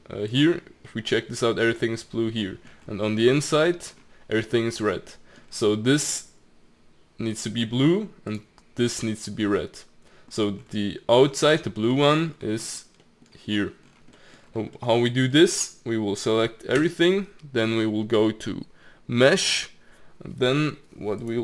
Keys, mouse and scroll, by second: 0.2 click, 0.8-2.8 middle drag, 2.8 scroll up 4, 3.0 middle click, 3.5-4.7 scroll up 5, 4.7-5.1 scroll down 4, 5.1 middle click, 5.4-8.2 scroll down 3, 8.2 click, 9.6 middle click, 10.3-11.3 scroll up 5, 11.3-11.9 scroll down 2, 11.9 middle click, 12.3-13.0 scroll up 9, 13.0 middle click, 13.8-14.1 scroll down 4, 14.1 middle click, 14.4-15.3 scroll down 6, 14.7 middle click, 15.3-16.8 middle drag, 16.8 a, 19.3-21.4 drag.